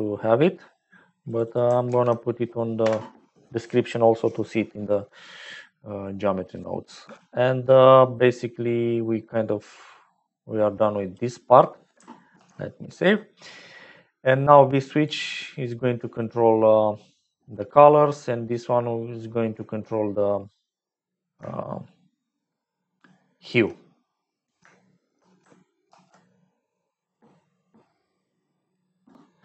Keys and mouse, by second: 1.4-3.9 ctrl+drag, 7.0 n, 8.6-11.1 drag, 12.3 ctrl+s, 14.9 click, 17.3 click, 18.7-23.8 drag, 24.8 shift+middle click, 25.8 ctrl+s.